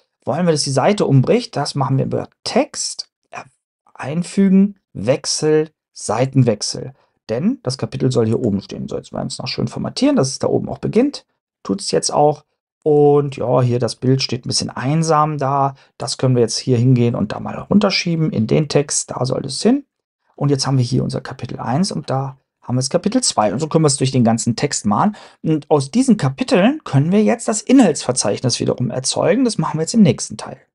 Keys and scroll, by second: 9.1 BackSpace, 10.0 BackSpace, 10.9 BackSpace.